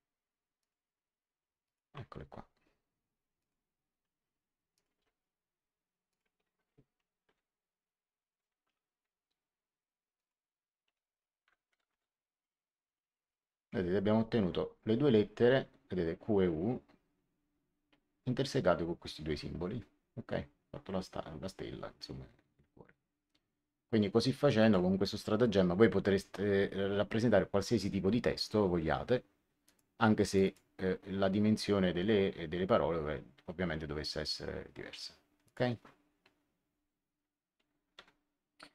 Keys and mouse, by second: 1.6 click, 3.3 click, 4.7 click, 4.9 m, 6.0 click, 7.2 w, 10.1 click, 10.8 w, 11.8 Return, 11.8 KP_Enter, 24.5 click, 29.6 click, 35.4 click, 37.9 ctrl+1.